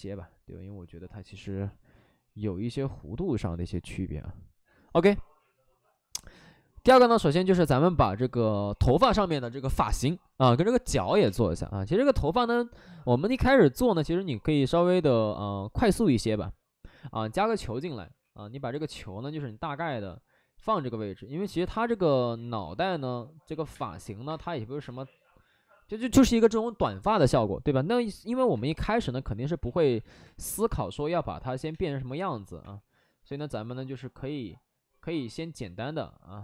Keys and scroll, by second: 18.1 w, 22.6-24.7 typing, 27.8 space, 28.4 space, 29.6 ctrl+z, 29.8 w, 29.8 3, 30.0 3, 30.1 3, 31.3 ctrl+z, 31.6 2, 32.5 3, 35.1 2.